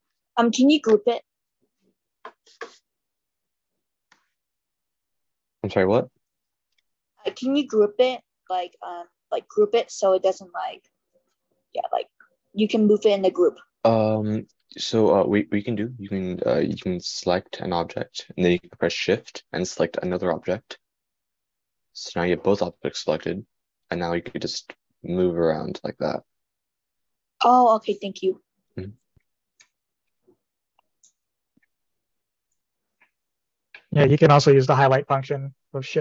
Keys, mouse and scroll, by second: 29.3-36.0 drag.